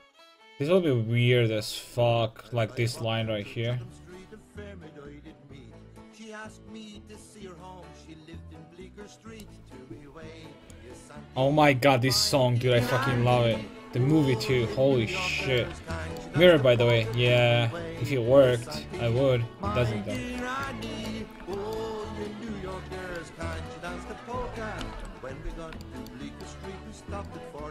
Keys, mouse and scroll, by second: 8.9 Tab, 9.3-12.2 right drag, 15.4-19.3 middle drag, 20.4-22.5 middle drag, 22.5 right click, 22.7 Tab, 24.8 KP_5, 25.0 KP_1.